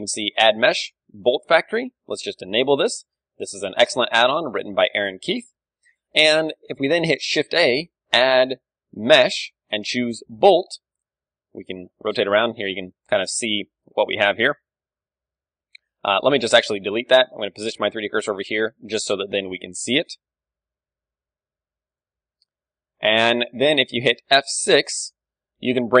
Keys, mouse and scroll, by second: 7.5 shift+a, 11.2-13.1 middle drag, 13.4-16.0 middle drag, 16.0 scroll up 1, 16.3-18.0 middle drag, 16.3 x, 16.7 KP_1, 18.0-19.7 drag, 18.8 shift+a, 19.7-20.7 middle drag, 20.3 shift+a, 22.6-26.0 middle drag.